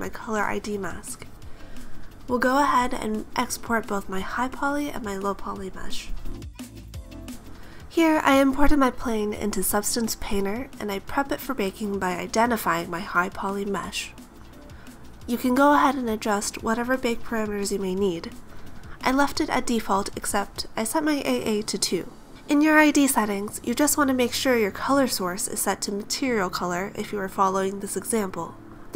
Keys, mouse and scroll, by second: 0.1 click, 0.4 click.